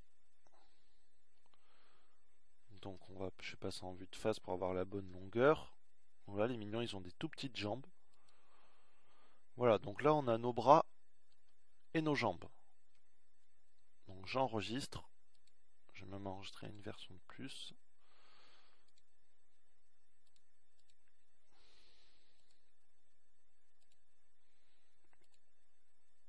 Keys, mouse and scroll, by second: 7.4 KP_1, 9.5 e, 19.3 ctrl+s.